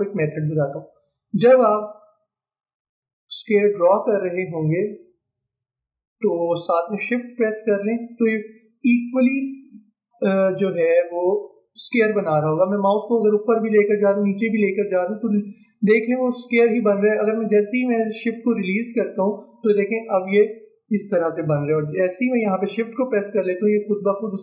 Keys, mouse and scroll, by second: 3.2-13.3 drag.